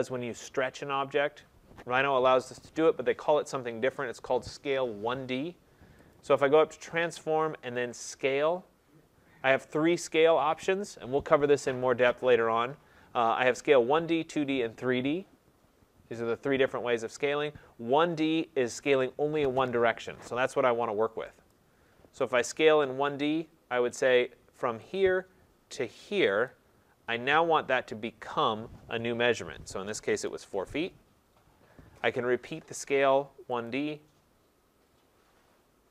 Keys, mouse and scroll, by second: 6.1 click, 21.5 click, 25.0 click, 26.5 click, 29.9-30.4 typing, 33.7 click, 35.2-35.9 typing.